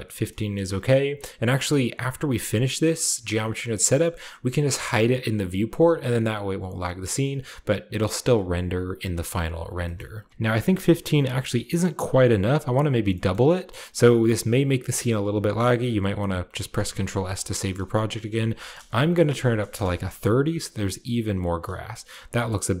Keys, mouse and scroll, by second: 0.5 middle click, 0.8-1.7 shift+middle drag, 3.0-6.2 scroll down 1, 3.4-6.2 middle drag, 6.2-6.8 scroll down 1, 6.8-9.2 scroll down 1, 9.6 shift+click, 9.7-12.6 shift+middle drag, 10.3 Return, 10.3-11.9 shift+scroll up 1, 10.3 5, 10.3 KP_0, 11.9-12.6 scroll up 1, 12.6 scroll down 1, 13.0-14.7 shift+middle drag, 16.6 ctrl+s, 18.0-19.6 drag, 19.2 typing, 19.6 Return, 21.4-22.8 scroll down 1, 22.0 shift+middle click, 22.7 shift+middle click.